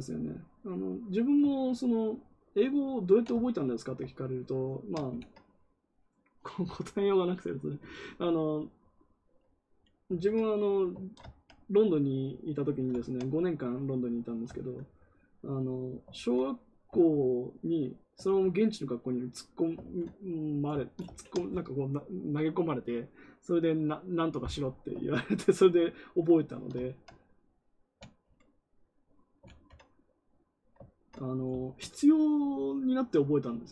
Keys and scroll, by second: 5.0 ctrl+z, 10.1 ctrl+z, 16.0 ctrl+z, 18.2 ctrl+z, 19.7 ctrl+z, 29.4 ctrl+z.